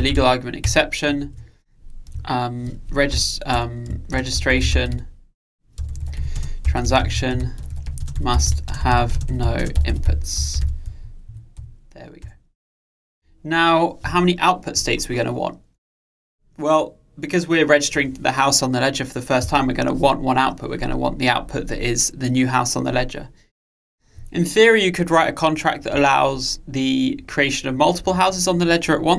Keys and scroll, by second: 0.7 Return.